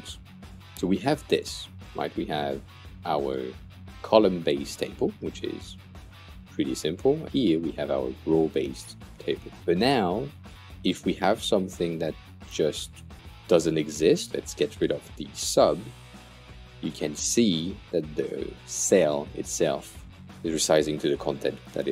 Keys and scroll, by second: 15.9 BackSpace.